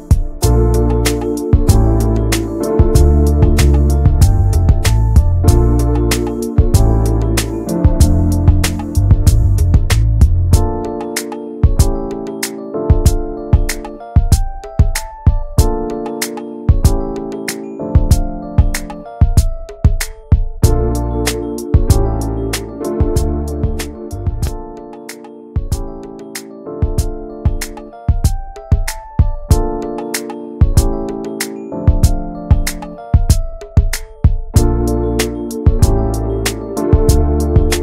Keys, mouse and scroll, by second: 0.1 shift+middle click, 0.6-2.7 drag, 2.7 scroll down 2, 3.1 shift+middle click, 3.5 scroll down 1, 4.5 l, 4.9-5.2 scroll up 2, 5.2 shift+middle click, 5.7-7.1 shift+middle drag, 7.1 click, 8.4 scroll down 4, 8.6 alt+z, 9.0 click, 9.2 scroll down 2, 9.3 middle click, 9.9 shift+middle click, 10.5 ctrl+s, 10.6 click, 10.9 `, 11.5 click, 11.9-14.1 middle drag, 14.1 click, 14.4 middle click, 14.9 Tab, 15.2 middle click, 15.7 Tab, 15.8 middle click, 16.1 ctrl+s, 16.3 middle click, 16.5-17.0 scroll up 2, 16.6 Tab, 17.1 shift+middle click, 17.8 ctrl+s, 18.0 middle click, 18.7 ctrl+s, 19.0 shift+middle click, 19.6 ctrl+s, 20.1-21.2 drag, 21.4 alt+middle click, 21.6 alt+middle click, 21.8 alt+z, 22.3 alt+middle click, 22.9-23.3 alt+scroll up 1, 23.4 ctrl+click, 24.2 shift+middle click, 24.8 ctrl+click, 25.8-26.8 middle drag, 26.8 alt+z, 27.0 middle click, 27.8 shift+d, 28.5 middle click, 29.0 e, 31.4 click, 31.8 l, 32.4 click, 33.8-35.0 middle drag, 35.0-35.3 scroll up 1, 35.3 middle click, 36.3 click, 36.8 alt+shift+click, 37.3 alt+shift+click.